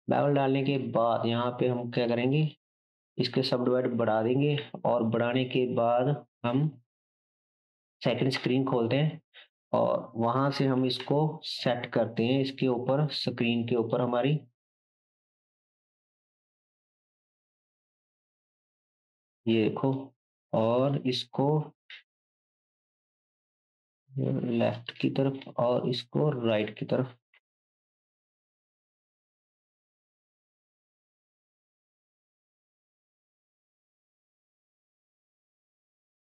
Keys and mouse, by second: 0.7-7.2 drag, 0.7-7.2 middle drag, 0.7-7.2 right drag, 4.6 KP_0, 8.3 KP_7, 10.8 g, 14.0-15.4 drag, 19.2 click, 19.2 middle click, 19.2 right click, 24.8-26.0 shift+drag, 30.6 shift+click, 30.7-35.5 middle drag, 30.7-35.5 right drag, 32.6 Tab, 34.0-35.5 drag.